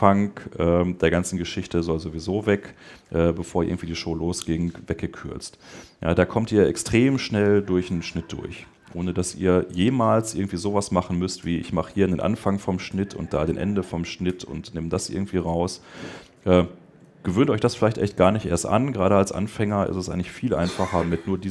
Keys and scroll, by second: 14.1 BackSpace, 15.0 super+BackSpace.